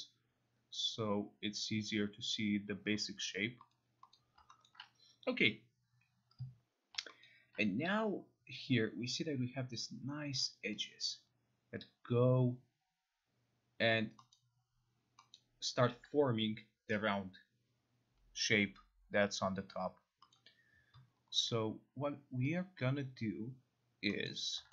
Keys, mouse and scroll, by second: 3.7 middle click, 4.2 middle click, 4.7 alt+middle click, 7.2 alt+middle click, 14.3 middle click, 15.3 middle click, 20.3 middle click.